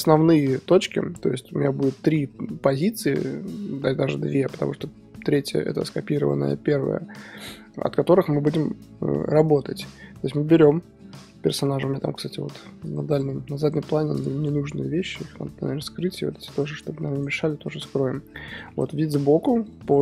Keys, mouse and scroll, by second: 10.3 KP_1, 10.4-11.4 drag, 11.2-11.7 middle drag, 11.4 click, 11.7 scroll down 1, 11.9-13.7 middle drag, 13.7-14.4 drag, 15.6 h, 16.3 h, 16.4-16.8 drag, 16.9 h, 17.3 h, 17.4-17.9 scroll down 2, 17.6-17.9 middle drag, 17.9 scroll up 2, 18.6 click, 19.0 KP_3.